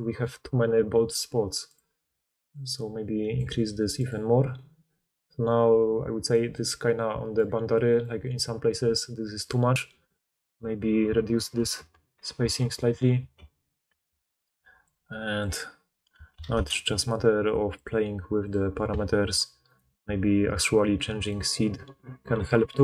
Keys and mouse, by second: 1.8-4.0 drag, 1.8-4.0 middle drag, 7.4-9.4 drag, 9.4-19.8 middle drag, 19.8-22.8 drag.